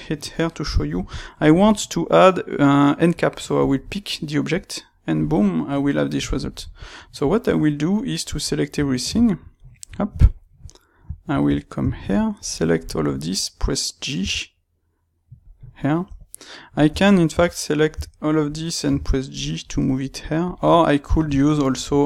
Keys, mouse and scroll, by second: 3.5 click, 5.3-6.9 middle drag, 6.9 click, 7.3 Tab, 8.4-12.3 middle drag, 11.4 Tab, 12.3 click, 12.6-14.1 ctrl+right drag, 14.1 g, 15.5 click, 15.9 Tab, 17.2 a, 20.4 click, 20.6-22.0 middle drag.